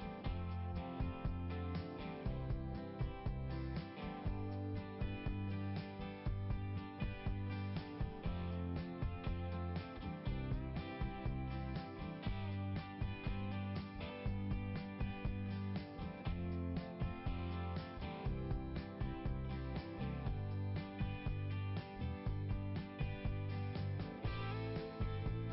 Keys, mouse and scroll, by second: 1.1 click, 3.4 click, 4.3 click, 7.3 click, 8.5 click, 11.7 click, 13.6 click, 14.4 click, 16.3 click, 16.5 click, 18.4 click, 20.4 click, 21.4 click, 23.2 click, 24.5 scroll up 1.